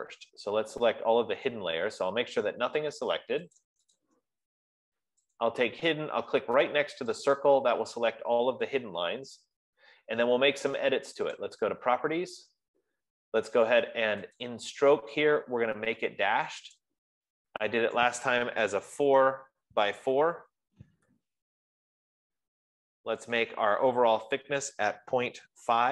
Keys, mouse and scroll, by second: 4.2 click, 4.5 click, 5.7 click, 7.8 click, 11.9 click, 14.9 click, 17.3 click, 19.1 4, 20.2 Tab, 21.3 4, 21.6 Tab, 23.8 click, 23.9 typing, 25.1 click, 25.6-25.9 typing.